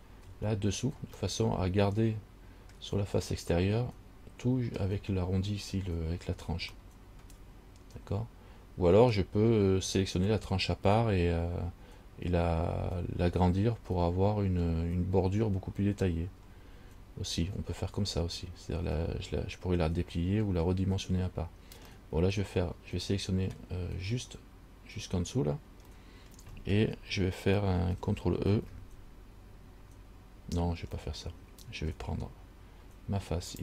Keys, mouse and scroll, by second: 1.5 middle click, 3.7 middle click, 7.0 middle click, 22.1 middle click, 26.1 middle click, 28.7 ctrl+e, 31.2 middle click.